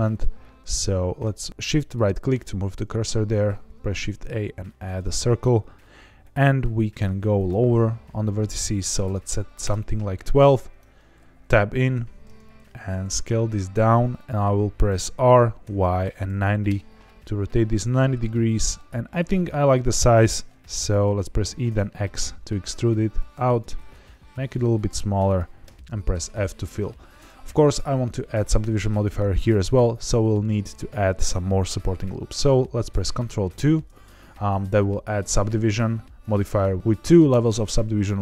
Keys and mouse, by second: 1.7 shift+right click, 3.4 shift+a, 7.4-10.0 drag, 10.6 Tab, 11.9 1, 12.5 s, 14.1 click, 15.1 r, 15.6 y, 16.1 KP_9, 16.2 KP_0, 16.6 KP_Enter, 17.9-20.1 middle drag, 21.3 e, 21.6 x, 23.4 click, 23.7 s, 25.2 click, 25.6 f, 27.1 Tab, 33.4 ctrl+2.